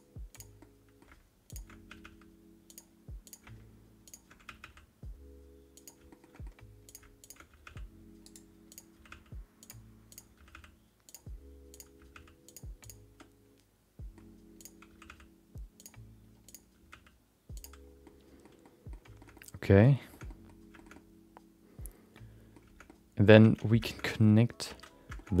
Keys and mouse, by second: 0.3 click, 0.6 middle click, 1.5 ctrl+shift+click, 2.6 g, 3.2 click, 4.4 g, 6.1 middle click, 6.3 middle click, 6.8 click, 7.2 click, 7.4 g, 8.7 click, 8.9 g, 10.1 click, 10.3 g, 11.7 click, 11.9 g, 12.8 click, 13.1 middle click, 14.6 click, 14.9 g, 16.4 click, 16.7 g, 18.0 middle click, 18.6 middle click, 19.2 shift+middle click, 20.1 shift+middle click, 20.2 middle click, 20.7 shift+middle click, 20.9-22.5 middle drag, 22.8 middle click, 23.7 Tab, 23.9 shift+middle click, 24.0 middle click, 24.6 alt+z, 25.1 shift+middle click, 25.3 middle click.